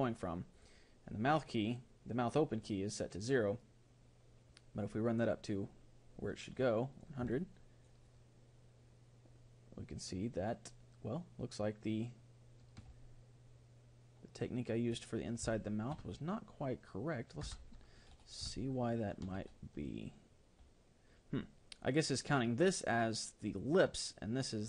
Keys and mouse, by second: 0.6-2.1 drag, 4.9-7.0 drag, 7.4-10.5 middle drag, 15.6-17.5 middle drag, 17.5 Tab, 18.7-20.5 middle drag.